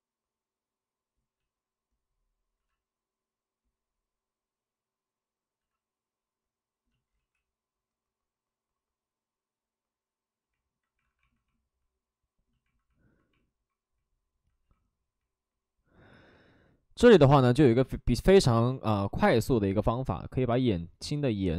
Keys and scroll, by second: 1.3 ctrl+z, 2.5 c, 4.9 c, 5.5 c, 7.1 ctrl+z, 11.0 alt+s.